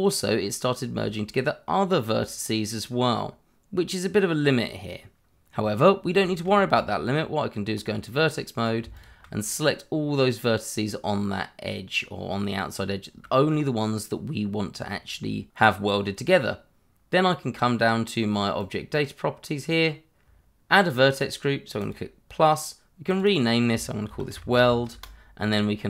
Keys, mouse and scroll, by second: 5.6 scroll down 1, 6.2 shift+middle click, 6.4 middle click, 6.7 Tab, 8.5 click, 8.9 alt+click, 9.5 middle click, 12.8 scroll up 1, 13.2 shift+middle click, 18.5 click, 21.8 click, 23.3 double click, 24.0 shift+w, 24.3 e, 24.5 l, 24.9 Return.